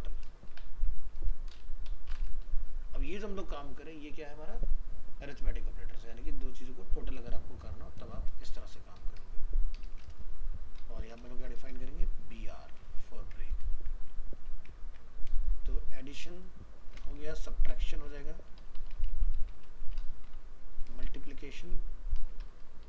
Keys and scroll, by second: 3.1 ctrl+s, 13.2 ctrl+c, 13.6 ctrl+Return, 13.7 ctrl+v, 21.1 ctrl+shift+Left.